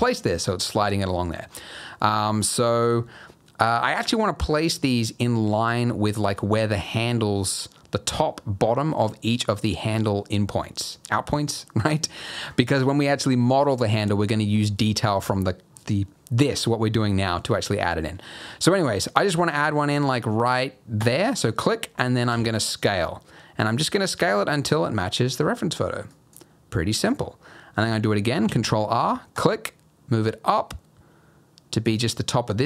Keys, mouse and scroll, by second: 22.3 s, 28.4 ctrl+r.